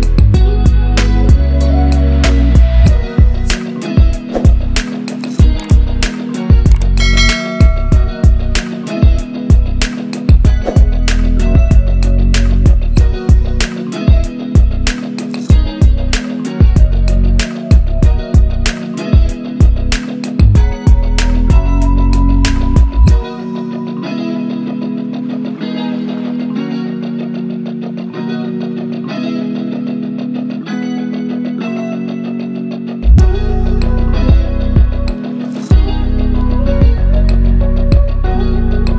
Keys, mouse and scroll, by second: 1.2 Left, 2.0 right click, 3.0 click, 3.6 scroll up 1, 4.1 click, 5.4-5.7 click, 5.7 scroll down 1, 6.1 scroll up 1, 6.6 scroll down 1, 7.0 scroll up 1, 8.0 right click, 8.6 click, 8.9 scroll down 1, 9.6-10.4 drag, 11.8 c, 12.1 click, 12.7 Up, 14.0-14.4 shift+drag, 16.4 Caps_Lock, 16.5 click, 16.9 c, 17.4 click, 18.2 c, 18.4 click, 19.0 Down, 19.5 click, 22.5 click, 25.0 ctrl+c, 25.2 click, 25.5 ctrl+v, 26.1-27.1 drag, 31.6 right click, 31.8 click, 32.3 ctrl+a, 33.2-34.3 drag, 35.2 ctrl+c, 35.7 click, 36.3 ctrl+v, 37.2 click, 38.4 right click, 38.5 click.